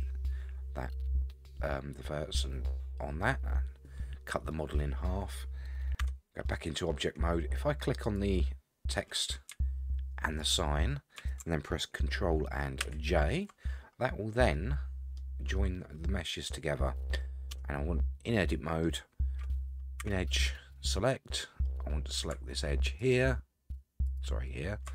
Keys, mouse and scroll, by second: 4.5 middle click, 6.0 Tab, 6.5 middle click, 8.0 click, 10.2 shift+click, 12.8 ctrl+j, 14.4 scroll down 1, 14.5-15.2 middle drag, 15.3-15.6 scroll up 1, 15.6-17.2 middle drag, 17.5 Tab, 18.2 middle click, 20.0 2, 20.9 middle click, 22.1 scroll up 1, 23.0 alt+click, 24.1 alt+click.